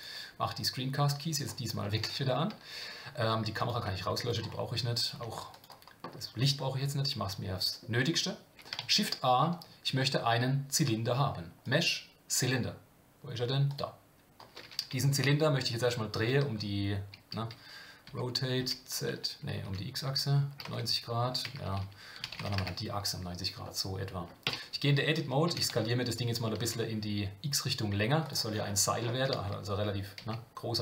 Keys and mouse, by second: 1.1 click, 1.8 middle click, 3.6 click, 5.0 click, 5.1 x, 6.5-7.8 middle drag, 8.8 shift+a, 17.3 Escape, 18.1 r, 23.6-24.2 middle drag, 24.4 Tab, 25.5 s.